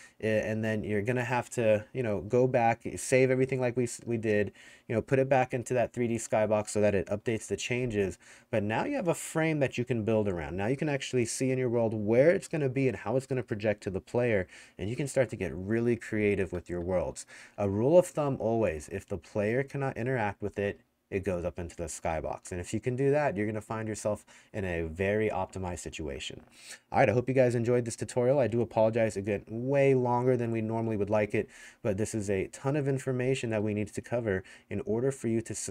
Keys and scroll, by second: 17.5-19.3 typing.